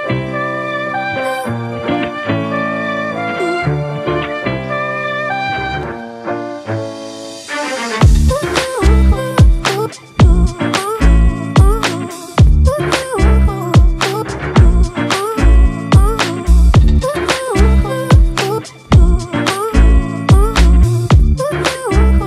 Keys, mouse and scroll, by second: 8.1-8.7 ], 15.6-16.6 scroll up 1, 16.6 ], 19.8-20.8 typing.